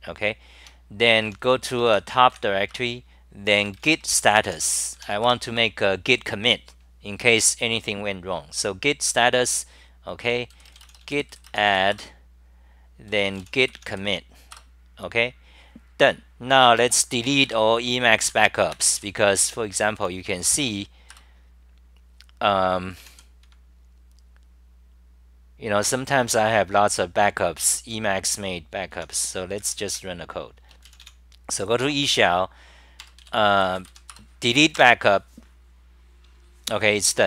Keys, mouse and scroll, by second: 0.0-0.2 typing, 0.6 Home, 1.2 u, 2.7 Return, 5.2 Return, 11.9 Return, 13.9 Up, 14.3-15.0 typing, 16.9 Home, 17.4 F10, 18.3 ctrl+g, 19.0 BackSpace, 20.0-20.6 t, 21.2 Return, 22.8-23.7 typing, 24.5-28.2 scroll down 78, 25.0 middle click, 28.9 Home, 29.9 super+w, 34.1 Return, 34.8 Return.